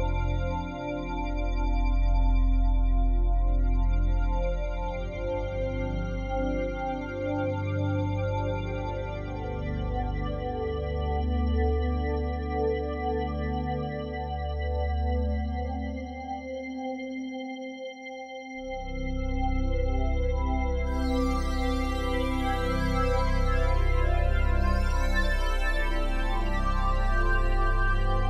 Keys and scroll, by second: 10.1 typing, 17.4 ].